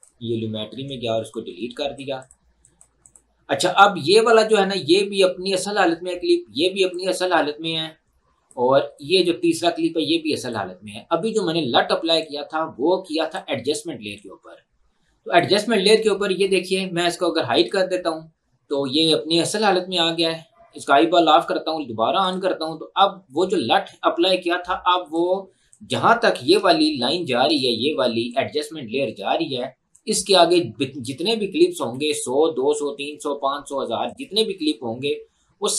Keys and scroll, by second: 0.8 Delete, 27.0 ctrl+2, 31.9 Escape.